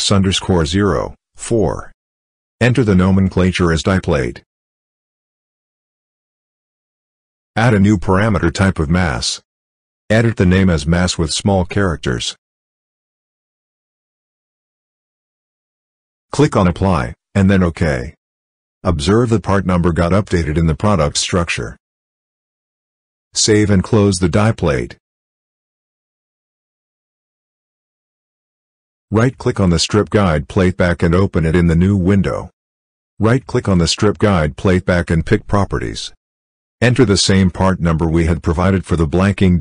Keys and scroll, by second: 0.9 4, 3.0-7.1 typing, 12.8 m, 13.3 a, 22.9 ctrl+s, 38.4 ctrl+v.